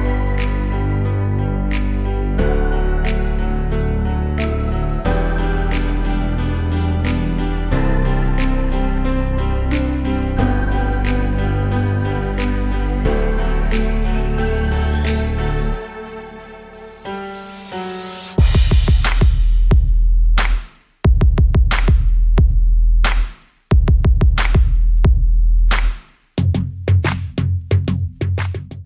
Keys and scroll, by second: 0.2 ctrl+g, 4.4 BackSpace, 5.5 b, 6.9-10.2 typing, 11.2 Return.